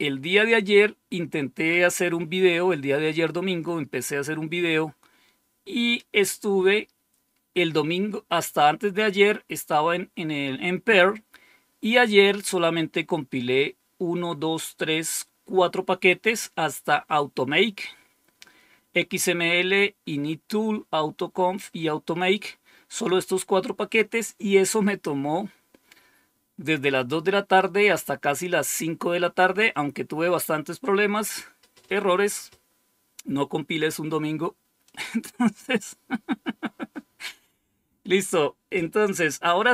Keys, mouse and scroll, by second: 34.7 click.